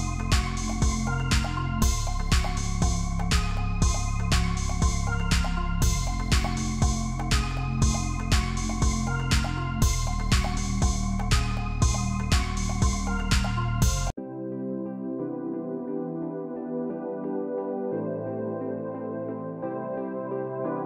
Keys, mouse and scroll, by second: 8.2 double click.